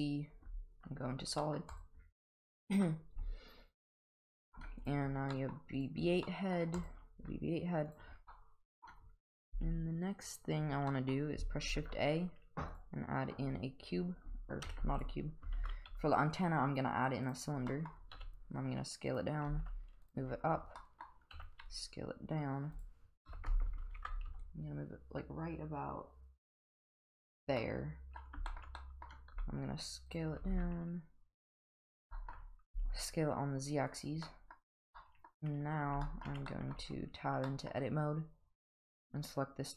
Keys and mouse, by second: 0.4 z, 1.4 middle drag, 2.9-4.5 middle drag, 5.3 middle drag, 6.3 middle drag, 7.2 s, 8.3-8.8 middle drag, 9.5 g, 10.9 middle drag, 11.8 shift+a, 14.6 Delete, 15.6 shift+a, 17.7 middle drag, 18.2 s, 19.5 g, 20.8 middle click, 21.3 s, 23.3 KP_7, 24.3 g, 27.6-28.2 middle drag, 28.5 shift+middle click, 28.8 middle click, 29.3 s, 30.4 g, 32.1 shift+middle drag, 32.7 s, 34.2 middle click, 35.0 middle drag, 36.0 shift+middle drag, 36.5 middle drag, 36.8 Tab, 37.5 middle click, 39.0 click.